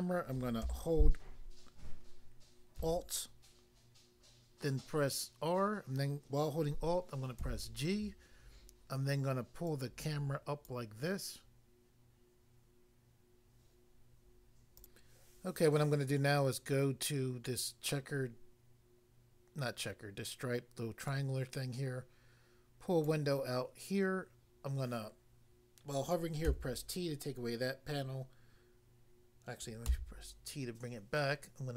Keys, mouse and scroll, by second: 2.7 alt+r, 7.4 alt+g, 9.6 click, 10.7 click, 14.8 click, 14.9 click, 21.2 click, 23.0 click, 26.5 t, 30.0 t.